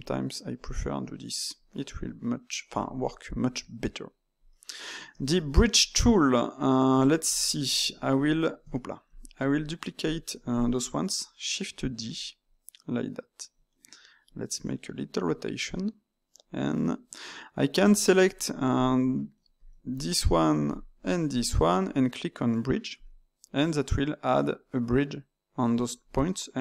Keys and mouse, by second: 0.5 click, 1.3-7.8 middle drag, 7.8 Tab, 8.4 click, 8.5 Tab, 9.0 click, 9.5 shift+click, 10.6-11.9 middle drag, 11.9 shift+d, 13.6 middle click, 14.5 r, 17.8 Tab, 18.7 shift+click, 19.9 shift+click, 20.1 shift+click, 20.6 shift+click, 20.9 shift+click, 21.3 shift+click, 22.9-25.9 drag.